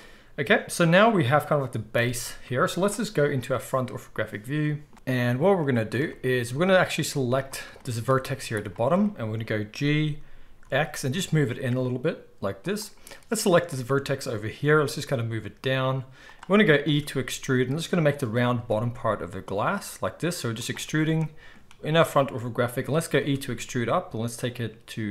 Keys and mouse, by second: 1.9 KP_1, 5.6-8.7 middle drag, 7.0 z, 8.7-12.7 shift+drag, 9.7 g, 12.7 middle click, 13.1-16.3 drag, 14.6 g, 16.3-25.1 middle drag, 16.8 e, 18.5 e, 23.1 e.